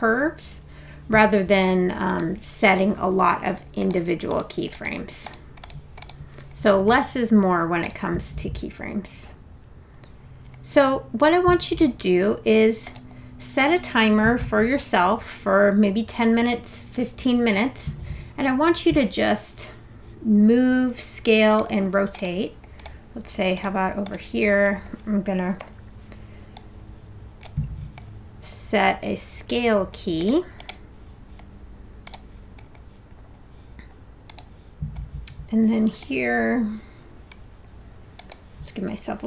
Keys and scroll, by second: 25.6 r.